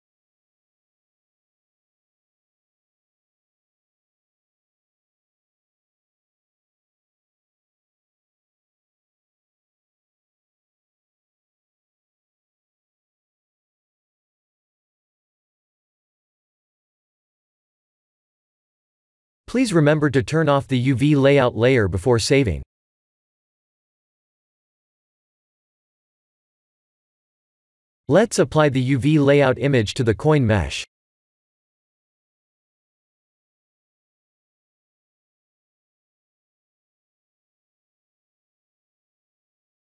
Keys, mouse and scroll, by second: 28.4 click, 30.1 click, 32.0 shift+middle click, 32.8 shift+a, 38.0 click.